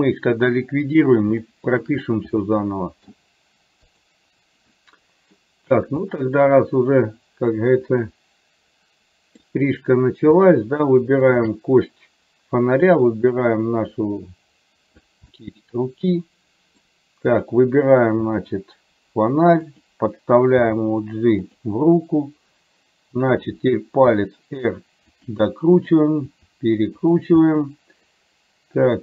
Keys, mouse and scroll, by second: 0.1-1.1 middle drag, 1.5 shift+middle click, 2.5 middle click, 4.1 click, 4.9 middle click, 6.1-9.5 middle drag, 11.4 shift+click, 12.9-15.1 drag, 15.4-16.9 middle drag, 17.4 click, 18.4 r, 20.8 g, 24.1 r, 25.9 click, 26.5 r, 27.5-29.0 middle drag.